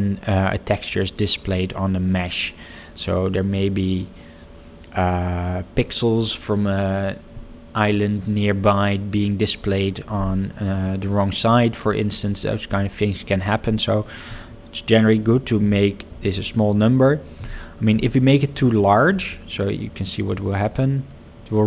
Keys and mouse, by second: 14.0-21.6 drag, 16.2 0.